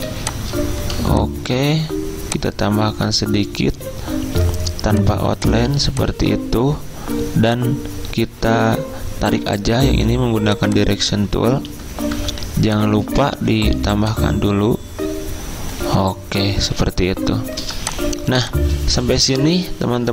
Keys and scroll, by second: 0.1 z, 1.4-2.2 typing, 9.8 a, 12.2 =, 13.8 a, 17.7-18.7 typing.